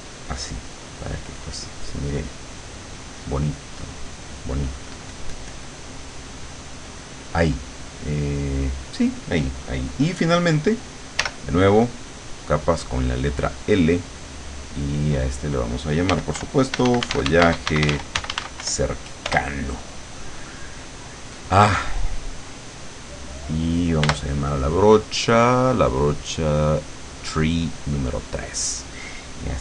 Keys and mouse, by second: 0.0 click, 0.4 click, 1.4 click, 3.2-4.8 drag, 5.0-6.9 drag, 8.1 click, 8.6 click, 11.2 l, 12.8 click, 13.6 click, 14.5 click, 15.9-18.7 typing, 20.4 click, 21.2 click, 24.1 b, 25.1-26.8 drag, 27.8 click.